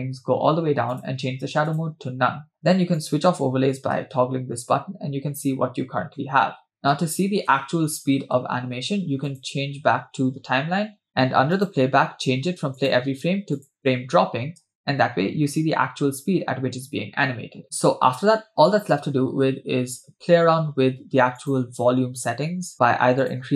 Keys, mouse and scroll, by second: 0.9-2.1 drag, 3.2 click, 4.1 space, 5.1-5.7 scroll up 4, 6.3 scroll down 2, 6.8 space, 7.1 space, 7.7 space, 8.4 space, 9.4-11.1 drag, 14.2 click, 14.8 space, 17.6-18.2 scroll down 3, 19.1 space, 21.4-23.5 drag, 22.7-23.2 scroll up 2.